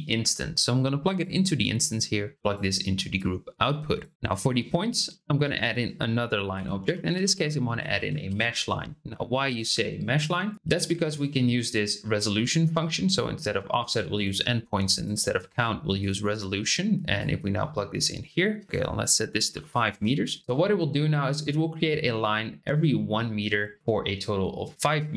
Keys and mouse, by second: 1.9-2.5 drag, 3.2 click, 4.1 click, 5.2 shift+a, 10.4 click, 11.2-12.8 drag, 13.2-14.3 drag, 14.9-16.0 drag, 17.1-20.3 drag.